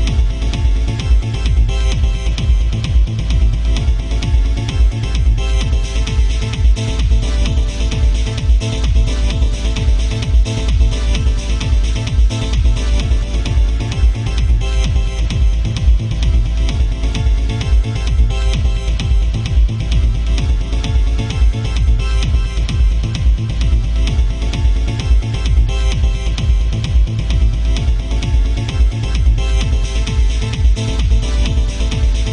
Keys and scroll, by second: 5.9 alt+space, 15.2 ctrl+z, 16.0 ctrl+z, 16.8 ctrl+z, 17.6 ctrl+z.